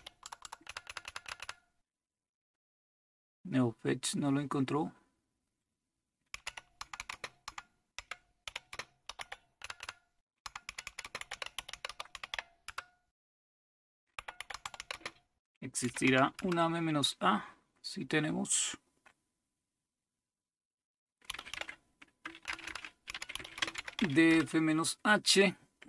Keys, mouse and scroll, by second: 0.0-1.4 typing, 6.2-12.8 typing, 13.9-16.5 typing, 21.1-24.5 typing.